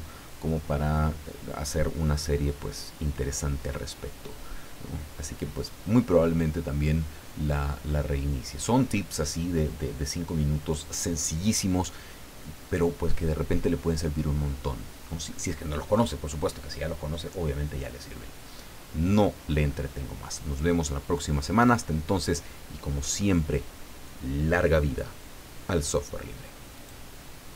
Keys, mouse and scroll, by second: 26.8 click.